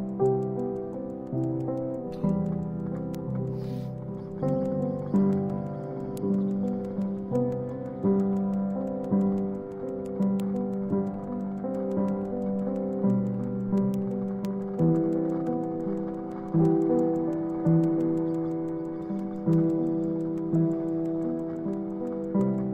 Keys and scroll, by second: 21.5 super+ç.